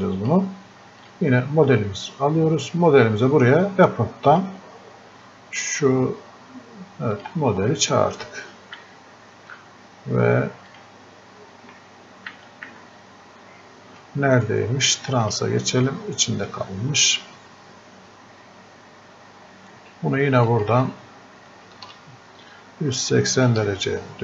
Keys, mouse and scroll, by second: 0.0 click, 4.3 click, 7.1 click, 8.8 f, 10.7 click, 12.4 f, 12.7 f, 15.3 click, 20.5-24.2 drag.